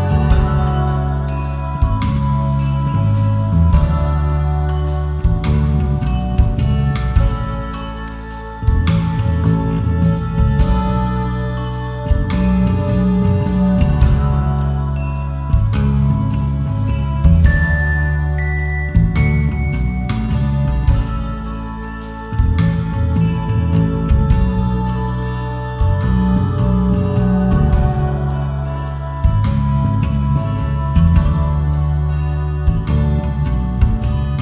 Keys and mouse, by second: 0.8 click, 1.8 click, 4.4 alt+z, 5.0-6.7 drag, 7.7 m, 9.3 alt+z, 10.9 shift+click, 12.1-13.1 right drag, 15.6 click, 16.0 click, 16.3 click, 16.9 click, 18.3-21.3 drag, 21.3 Tab, 22.1-23.9 right drag, 28.3 click, 29.8 click, 32.4 Tab, 34.0 KP_7.